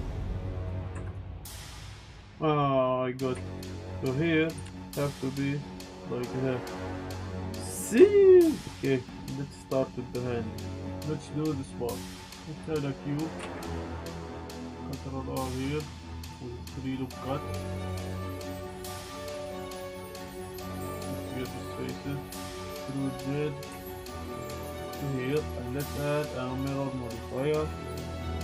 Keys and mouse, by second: 0.5 click, 0.9 Tab, 1.0 click, 1.5 click, 2.2 click, 3.3 z, 3.6 click, 3.6 z, 3.7 click, 3.9 click, 4.2 click, 4.5 s, 5.8 click, 6.0 Tab, 6.0-6.7 drag, 6.8-7.1 drag, 7.3-7.6 drag, 7.9-8.5 drag, 8.6 ctrl+z, 8.6 Tab, 8.6 shift+drag, 12.1 shift+a, 13.2 drag, 13.4 s, 13.4 z, 14.1 click, 14.3 g, 14.6 Tab, 14.6 ctrl+r, 15.8 click, 17.5 Tab, 17.5 z, 17.6 g, 17.7 y, 18.4 click, 18.7 ctrl+r, 19.3 click, 19.5 click, 19.8 ctrl+z, 19.9 click, 21.4 click, 22.7 w, 22.7 e, 22.7 z, 23.7 z, 24.8 Tab, 24.8 drag, 25.9 click, 26.2-28.1 drag, 28.3 click.